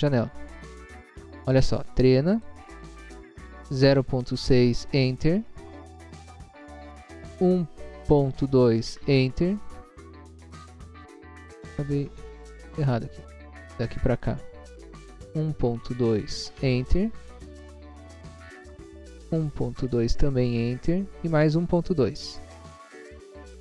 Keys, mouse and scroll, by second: 2.3 click, 2.3 t, 3.8-4.4 typing, 4.7 Return, 5.8 click, 7.4-9.9 typing, 10.1 Return, 13.5 click, 15.2-16.3 typing, 16.6 Return, 18.1 click, 19.2-19.8 typing, 20.2 Return, 21.8 click, 23.0-23.5 typing.